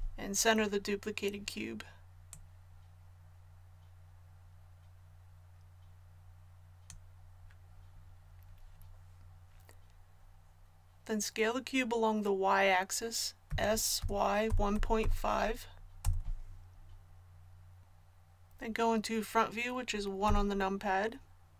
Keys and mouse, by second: 2.3-16.0 drag, 20.2 KP_1.